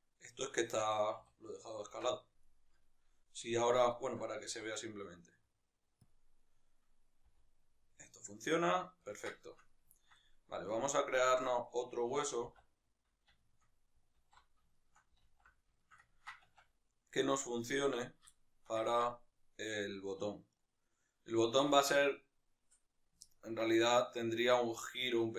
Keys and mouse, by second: 0.8 Tab, 1.2 a, 2.4 right click, 3.9-4.5 right drag, 4.5 s, 6.2 click, 6.5 right click, 7.3 r, 8.8 right click, 9.1-11.7 ctrl+middle drag, 11.7-12.5 right drag, 12.5 alt+s, 13.4-17.7 shift+middle drag, 14.4 alt+q, 15.5 alt+q, 16.6 Tab, 17.7 right click, 18.4-25.3 shift+middle drag.